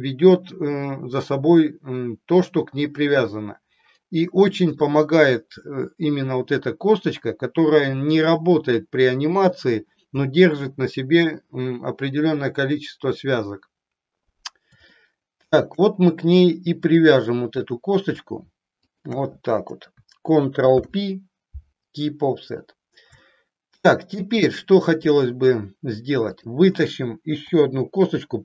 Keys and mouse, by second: 15.0 shift+middle click, 17.0 click, 18.7 shift+click, 20.6 ctrl+p, 23.2 middle click, 26.2 click, 27.5 e.